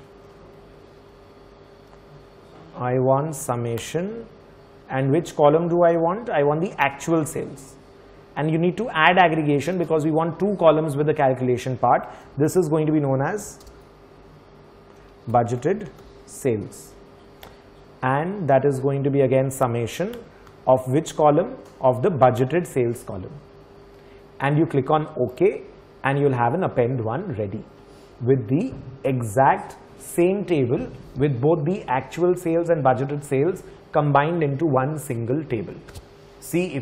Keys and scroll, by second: 0.6 shift+Tab, 12.0-16.5 typing.